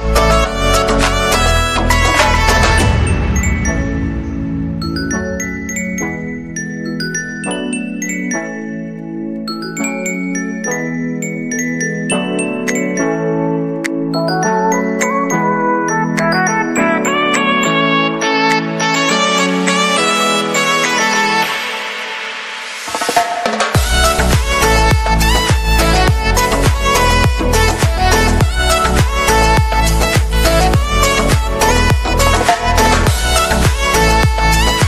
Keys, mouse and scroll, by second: 0.9 right click, 1.1 right click, 8.9 right click, 9.8 right click, 10.2 middle click, 10.5 right click, 11.6 right click, 12.1 right click, 15.8 right click, 17.1 right click, 17.5 right click, 19.8 right click, 23.2 right click, 23.3 right click, 32.0 right click, 32.2 right click.